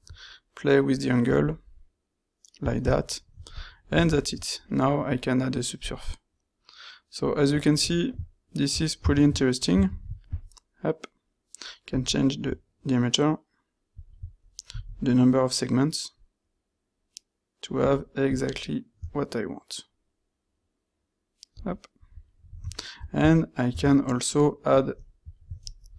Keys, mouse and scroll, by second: 9.1 ctrl+shift+q, 22.8-23.4 ctrl+middle drag, 25.5 w.